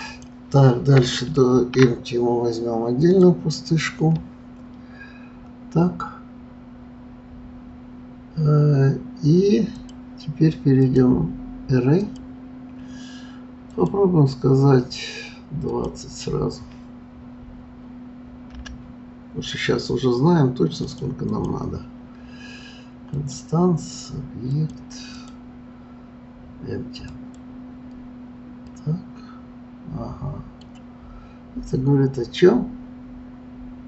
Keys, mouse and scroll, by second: 1.5 shift+a, 9.7 click, 10.8-16.7 drag, 21.3 click, 23.1 click, 24.5 click, 25.1-27.3 drag, 28.7-31.6 middle drag.